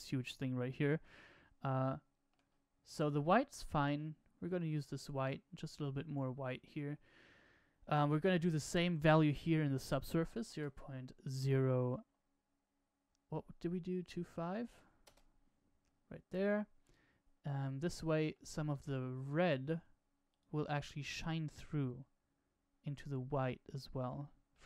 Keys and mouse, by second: 0.5 n, 2.8 click, 8.4-15.7 drag, 16.7-18.5 middle drag, 24.5-24.6 middle drag.